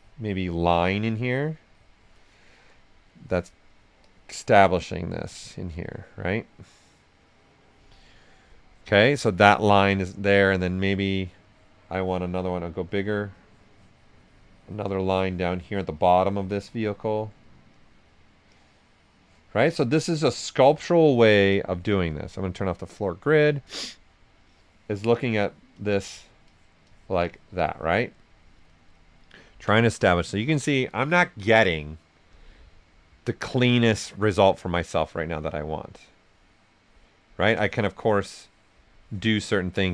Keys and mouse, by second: 2.1 right click, 2.1 typing, 3.7-5.3 drag, 5.3 right click, 5.8-7.8 drag, 7.8 right click, 8.8 alt+right click, 10.7 right click, 11.4 click, 12.4 s, 12.5-15.5 drag, 17.1 right click, 17.7 click, 18.5 click, 19.3 right click, 20.0 click, 20.7 right click, 21.5 click, 21.8 alt+right click, 22.3 right click, 23.5 right click, 24.4-28.1 drag, 28.1 right click, 34.4-39.7 drag, 34.4 typing, 39.7 right click.